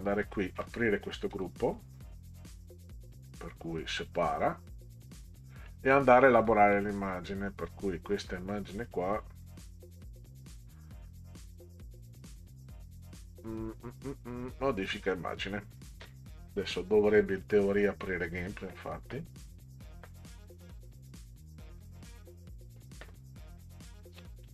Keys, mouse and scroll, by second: 1.3 click, 2.4 right click, 4.0 click, 5.4 middle click, 6.1 click, 6.7 click, 8.9 right click, 14.9 click.